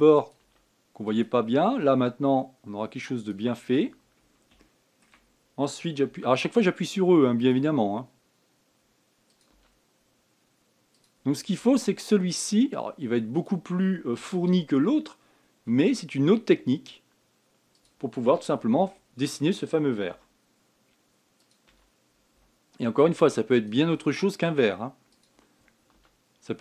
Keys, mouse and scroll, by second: 0.1 e, 1.2 e, 2.4 e, 4.4 scroll down 4, 5.4-6.8 shift+middle drag, 6.8 e, 8.3 e, 12.3 e, 15.0 shift+middle click, 15.5-16.4 shift+scroll up 1, 16.4 e, 18.9-19.4 scroll down 7, 19.7 shift+middle click, 20.1-20.9 shift+scroll up 1, 20.9 e, 22.4 e.